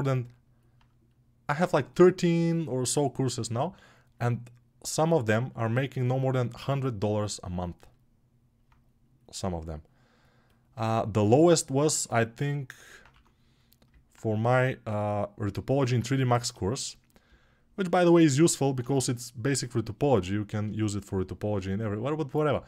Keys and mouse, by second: 4.1-22.6 alt+drag, 12.9 1.